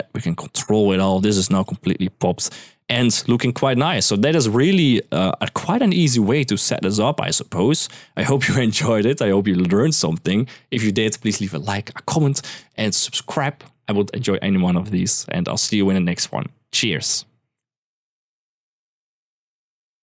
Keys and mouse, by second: 1.4 click, 2.0 click, 3.8 click.